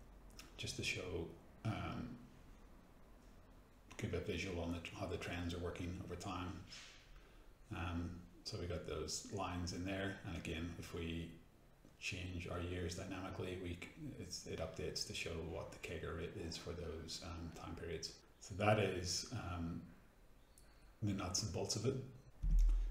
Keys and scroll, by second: 0.4 ctrl+c, 0.6 ctrl+v, 6.7 F9.